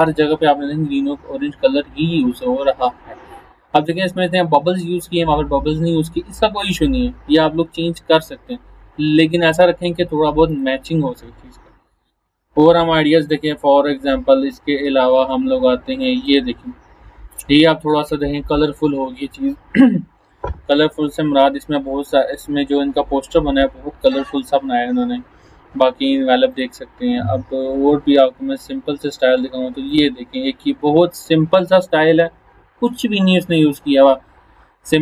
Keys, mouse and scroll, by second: 10.5 click, 12.4 scroll down 1, 16.2 click, 26.5 click, 27.2 scroll down 1, 29.9 click.